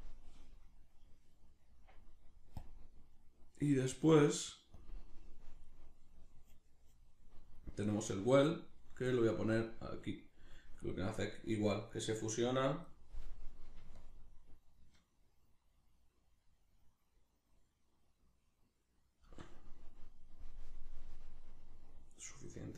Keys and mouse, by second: 1.5-2.6 middle drag, 2.6-3.1 drag, 3.1-4.1 middle drag, 4.1-11.5 drag, 11.5-14.0 middle drag, 14.0-20.8 shift+drag, 20.8-22.7 middle drag.